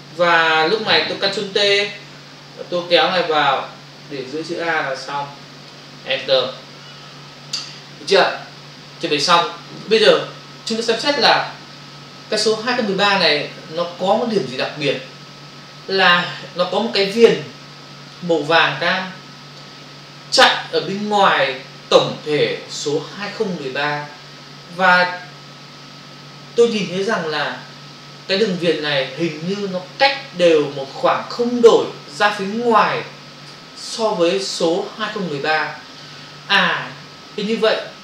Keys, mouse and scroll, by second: 3.3 click, 6.3 Return.